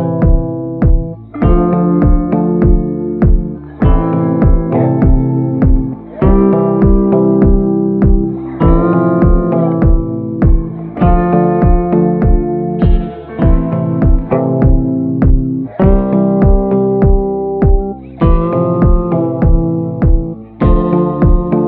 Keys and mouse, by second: 0.8 b, 1.7 middle click, 3.8 click, 5.2-5.8 ], 5.8-7.4 drag, 8.2 middle click, 9.5-11.3 right drag, 12.1 middle click, 13.4 right click, 15.8 b, 16.4 b, 17.0 click, 18.5-19.7 middle drag, 19.7 click, 20.2 a, 20.3 click, 20.9 click.